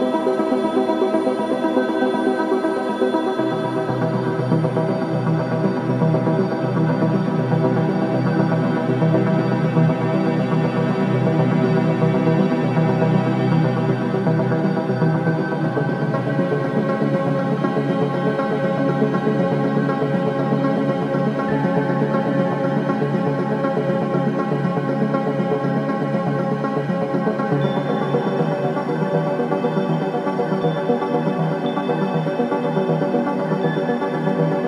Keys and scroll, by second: 2.0 3, 5.0 ctrl+z, 12.5 4, 17.5 ctrl+d, 17.5 Escape, 19.3 9, 19.7 Return, 26.1 1, 27.9 4, 30.3 3, 34.3 ].